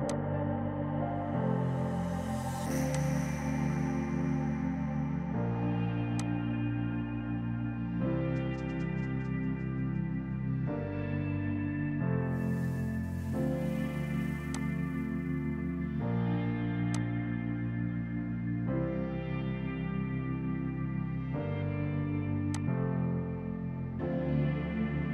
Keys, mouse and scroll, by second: 3.0 click, 6.2 click, 16.8 click, 22.6 click.